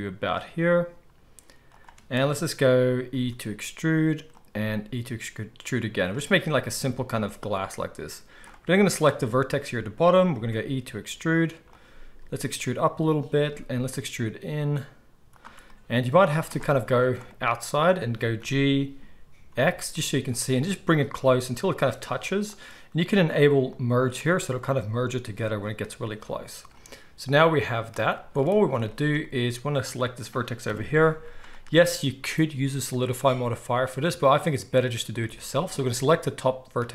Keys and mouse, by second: 3.1 e, 4.5 e, 8.5-11.8 drag, 10.3 e, 11.8-23.6 middle drag, 11.8 e, 13.4 e, 16.2 z, 18.3 g, 23.6 click, 23.7-36.2 middle drag, 30.6 KP_1, 31.0 z, 36.2-36.9 drag.